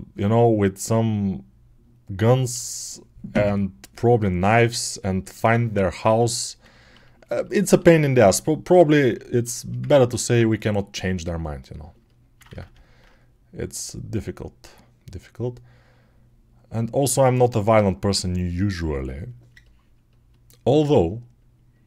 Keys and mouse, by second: 3.7-6.7 alt+drag, 6.7-8.2 alt+shift+right drag, 8.2-21.8 alt+drag, 19.7 alt+right click, 20.4 right click, 20.7 middle click, 20.7-21.8 right drag.